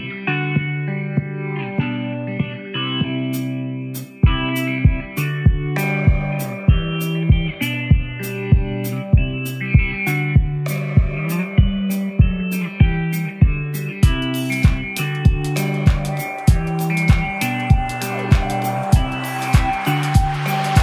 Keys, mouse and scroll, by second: 0.4-1.5 alt+scroll up 5, 3.4-11.5 drag, 12.4-14.6 drag, 15.9 ctrl+j, 17.0 ctrl+0, 19.6-20.8 drag.